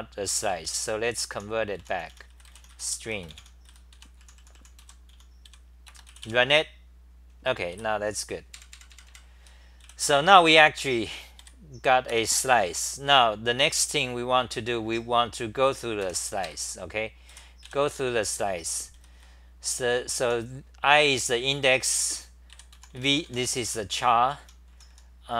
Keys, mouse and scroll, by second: 0.9-2.3 typing, 2.9 Home, 3.4-5.9 typing, 7.7 w, 8.5 super+=, 9.8 w, 11.4 3, 12.7 t, 13.9-14.2 scroll down 6, 15.6 r, 16.0 2, 16.4 ctrl+g, 17.3-19.1 typing, 18.9 scroll, 20.2 h, 21.4-25.3 typing, 23.7 Home.